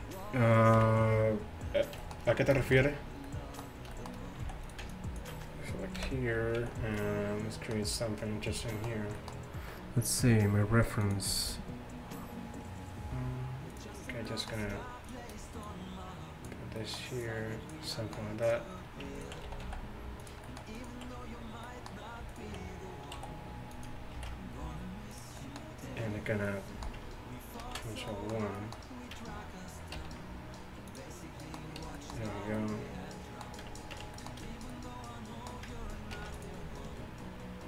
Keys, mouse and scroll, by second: 0.8 KP_1, 4.5 z, 4.7-6.0 middle drag, 6.0 click, 6.0 KP_Decimal, 6.6 z, 13.8-16.5 right drag, 15.7 click, 16.5 middle click, 16.8-19.5 drag, 16.8 right click, 19.5 middle click, 19.5 s, 20.3 right click, 20.5-21.8 middle drag, 22.3 middle click, 22.9 click, 22.9 middle click, 23.2 s, 24.2 ctrl+b, 27.7 ctrl+1, 29.2 Tab, 30.0 t, 31.9 t, 34.0 Tab, 36.2 ctrl+r.